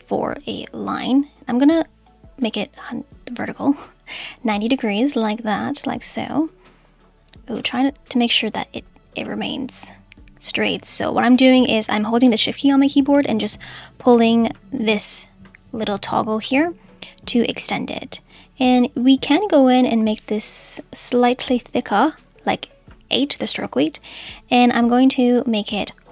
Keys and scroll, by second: 7.6 super+z.